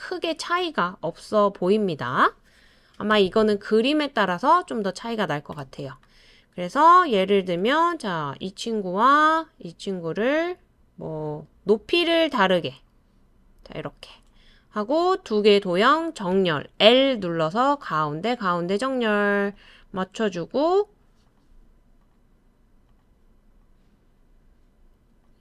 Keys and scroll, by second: 3.1 BackSpace, 16.3 BackSpace.